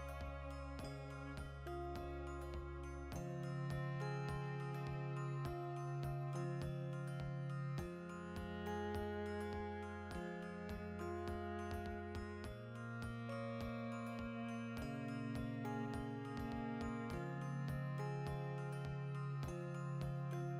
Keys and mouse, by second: 0.5 click, 1.0-2.6 middle drag, 1.8 Tab, 2.6 click, 3.6-5.0 middle drag, 5.0 Tab, 5.4 ctrl+a, 7.2 Tab, 9.2 middle click, 9.3-10.6 drag, 10.6-12.2 middle drag, 12.2 click, 13.2 ctrl+a, 14.3 shift+middle click, 16.1-18.0 drag, 17.0 ctrl+a, 18.0-19.0 shift+middle drag, 18.3 Tab, 19.0-20.5 drag, 20.4 Tab.